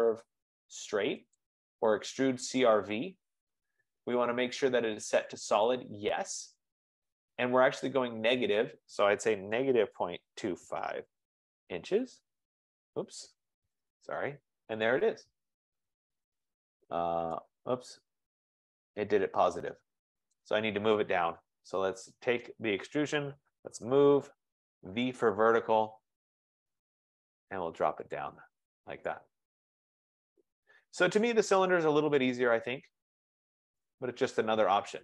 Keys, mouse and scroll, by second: 1.6 click, 5.8 click, 9.3-11.5 typing, 11.6 Return, 12.1 Return, 13.8 Escape, 15.0 click, 15.7 scroll, 16.1 scroll up 3, 16.7-17.6 scroll down 5, 18.0 scroll, 19.7 right click, 20.5 click, 22.9 click, 23.3-25.1 typing, 26.9 click, 27.0-27.7 typing, 27.7 click, 28.2 click, 28.7-29.1 scroll, 28.8 Return, 33.8 right click, 34.7 right click.